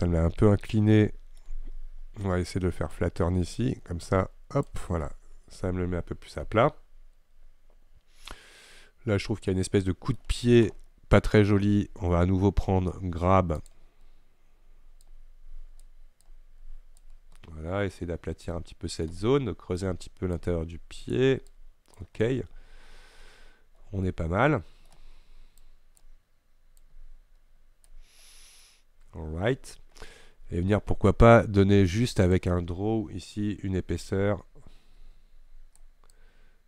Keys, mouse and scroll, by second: 1.5-3.0 scroll up 1, 3.0-5.1 drag, 5.1-8.1 middle drag, 13.8-17.5 drag, 17.5-19.1 middle drag, 19.1 scroll up 1, 19.3-20.4 middle drag, 20.4-22.3 drag, 22.3-25.0 middle drag, 25.0 scroll up 1, 25.7-28.4 drag, 28.4-32.4 middle drag, 32.4 click, 34.2-36.6 drag.